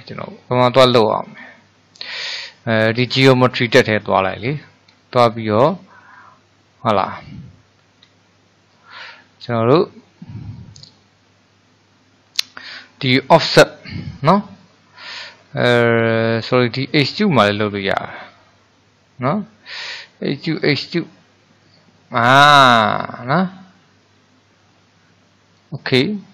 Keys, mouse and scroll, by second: 3.7-5.1 drag, 5.1-6.2 shift+middle drag, 6.2-7.3 scroll down 1, 7.3-7.8 scroll up 1, 7.8-8.3 scroll down 1, 8.3-11.4 shift+middle drag, 20.6-23.7 drag.